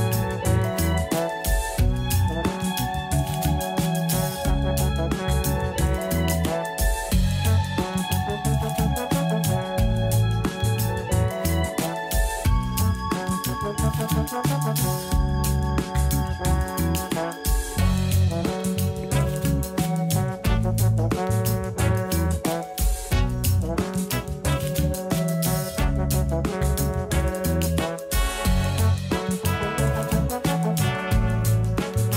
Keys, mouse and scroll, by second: 0.7 click, 15.8 click, 17.9-19.9 middle drag, 19.9-22.9 drag, 25.9-27.4 drag, 27.4 BackSpace, 27.5 BackSpace, 27.8 BackSpace, 28.0 BackSpace, 31.7 a, 32.0 a.